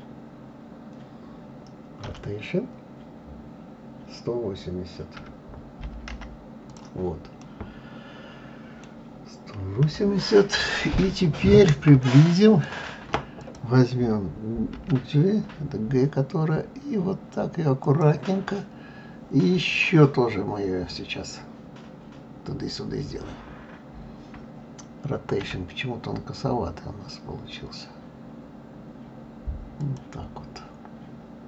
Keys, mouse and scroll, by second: 2.1 r, 7.4-9.8 middle drag, 9.8 KP_3, 11.1-11.7 scroll up 4, 12.0-13.4 shift+middle drag, 13.4 click, 14.8 g, 25.4 r.